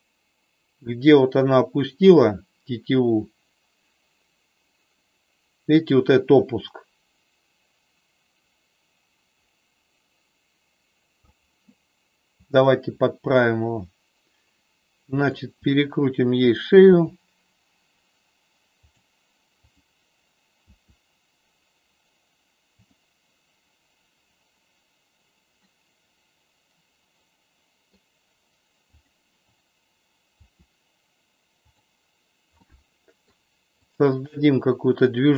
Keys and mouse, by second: 12.3 click, 15.3 click, 16.8 r, 19.7 click, 20.5 r, 25.5-27.9 middle drag, 30.4 r, 32.5 middle click.